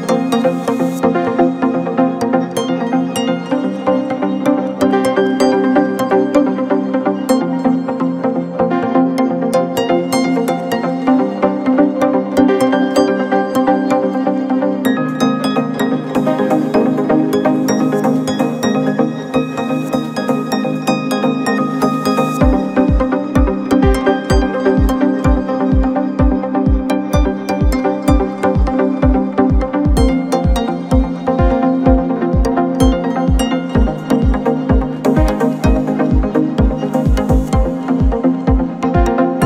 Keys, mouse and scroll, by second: 1.3-3.6 drag, 5.0 click, 5.6-8.4 drag, 8.8 click, 10.1 click, 10.9-13.1 drag, 17.3-18.5 scroll down 2, 18.5 click, 18.8-19.1 scroll up 1, 19.1 Tab, 19.8-20.3 scroll up 1, 20.3-20.6 scroll down 1, 20.6 a, 21.3 g, 24.7 s, 26.6 s, 27.9 g, 29.7-30.6 scroll up 2, 30.6 click, 30.7 click, 31.3 g, 33.9 s, 35.0 s, 37.3 click, 38.0 g.